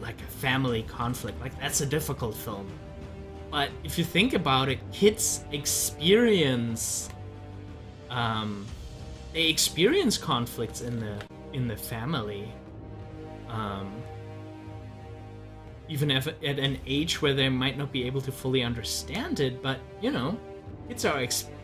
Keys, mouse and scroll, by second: 4.8-8.8 drag, 9.8-16.0 drag.